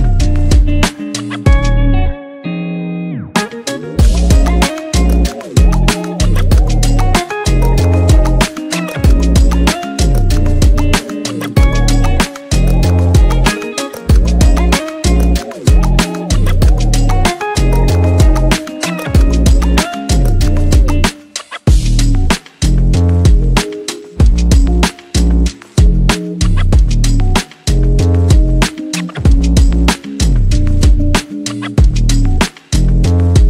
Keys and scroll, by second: 29.8 ctrl+v, 30.8 ctrl+c.